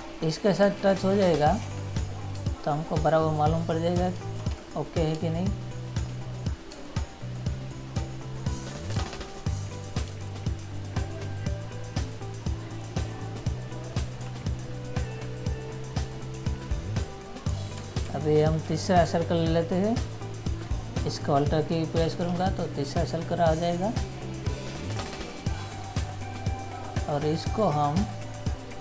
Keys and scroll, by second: 1.0 ctrl++, 2.5 space, 4.6 ctrl++, 5.3 space, 9.1 space, 14.4 Up, 16.5 Down, 18.0 ctrl+-, 18.7 ctrl+-, 19.4 ctrl+-.